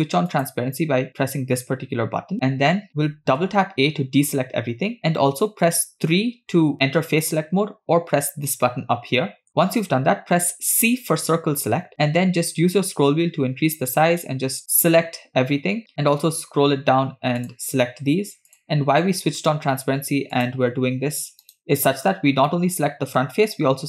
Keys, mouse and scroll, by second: 0.5 click, 2.5-3.1 scroll up 3, 4.8 a, 6.8 3, 10.3 c, 22.2-22.5 scroll down 2, 22.6-23.6 middle drag, 23.6-23.8 scroll down 2.